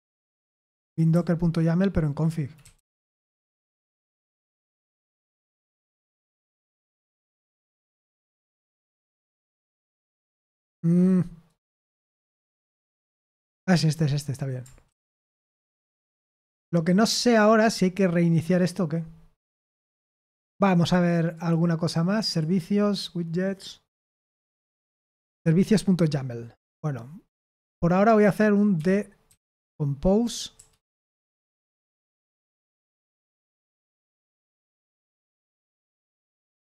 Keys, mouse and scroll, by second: 1.1-2.1 Left, 2.3-4.5 typing, 7.6 typing, 9.4 typing, 11.4-13.0 right drag, 13.0 Escape, 14.6-15.9 typing, 21.3 click, 22.2 click, 27.3 super+h, 28.7-29.2 typing, 30.5 BackSpace, 32.5 ctrl+p, 32.7 ctrl+p, 33.1 ctrl+p, 33.4 ctrl+p, 33.6 ctrl+p, 33.8 ctrl+p, 34.0 ctrl+p, 34.9 ctrl+p, 35.3 ctrl+p, 36.1 ctrl+p, 36.4 ctrl+p.